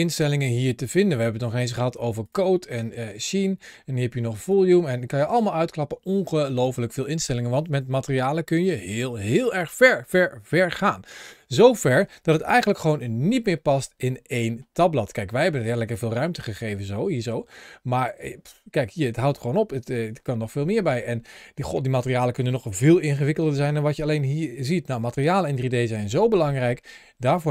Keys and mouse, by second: 2.1 click, 3.0 click, 4.2 click, 5.0 click, 7.7-10.4 middle drag, 12.3 ctrl+shift+a.